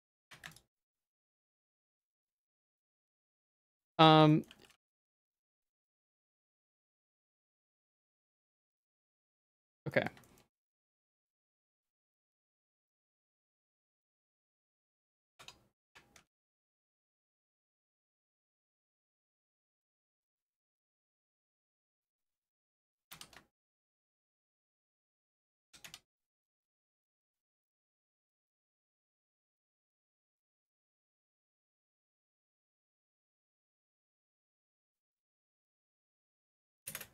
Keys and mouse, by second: 0.0-1.8 typing, 1.9 middle click, 2.8 click, 3.4 z, 3.8 shift+middle click, 4.3 shift+middle click, 4.7 g, 7.0 Tab, 7.2 z, 7.6 middle click, 8.2 Tab, 8.3 middle click, 8.9 shift+middle click, 9.6 z, 9.9 middle click, 10.2 shift+middle click, 10.6 middle click, 10.9 z, 11.5 middle click, 12.1 z, 12.8 z, 13.1 middle click, 13.3 g, 15.2 Tab, 15.4 Tab, 15.9 Tab, 16.2 z, 16.4 middle click, 17.6 middle click, 18.2 ctrl+s, 18.5 click, 18.7 middle click, 19.4 middle click, 20.0 Tab, 20.1 middle click, 20.3 z, 20.6 middle click, 20.8 shift+middle click, 21.5 Tab, 21.7 z, 21.9 middle click, 22.3 shift+middle click, 22.7 middle click, 22.9 s, 24.5 middle click, 24.8 middle click, 25.4 middle click, 25.7 s, 26.8 middle click, 27.2 Tab, 27.4 z, 27.6 middle click, 28.0 1, 28.8 middle click, 30.2-31.9 drag, 32.9 shift+middle click, 33.5 shift+middle click, 34.2 ctrl+click, 35.3 s.